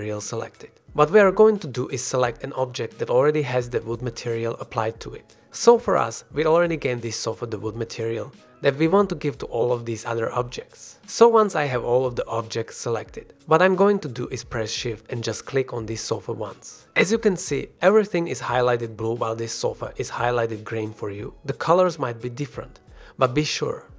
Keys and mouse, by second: 0.0-0.3 drag, 0.4 click, 1.2 g, 4.9-5.4 drag, 5.4 g, 7.7-8.0 drag, 8.5 shift+click, 10.5 g, 15.1 shift+click.